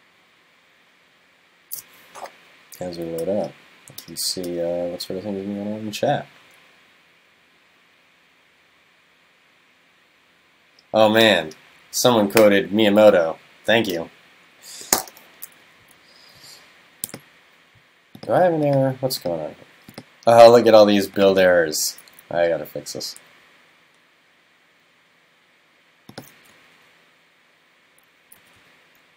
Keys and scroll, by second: 26.6 alt+Right.